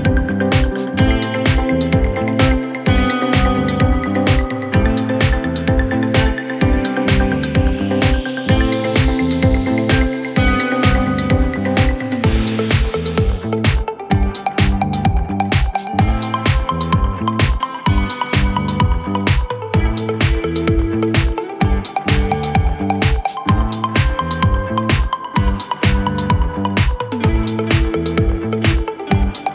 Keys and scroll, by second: 4.2 shift+Page_Up, 16.2 shift+Page_Up.